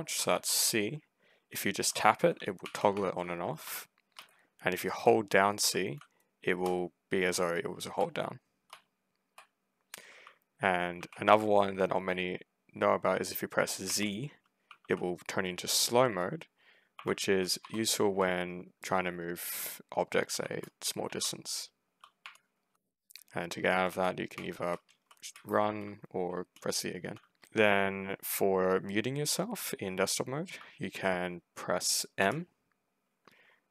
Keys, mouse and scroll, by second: 0.0 c, 1.5-5.5 typing, 7.2 c, 8.6 c, 10.1 w, 10.8 a, 11.2 s, 13.7-15.8 typing, 16.8-20.2 typing, 18.7-20.5 drag, 20.9 ctrl+z, 21.4-26.4 typing, 30.3 Escape, 32.1 m.